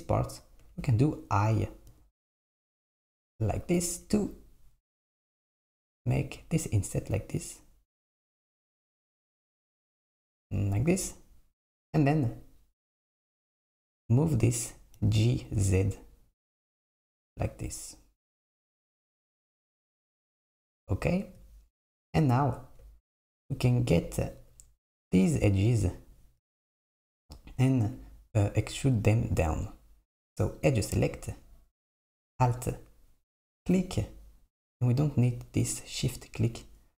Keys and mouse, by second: 15.0 g, 23.8 click, 30.6-32.6 drag, 36.2 shift+click.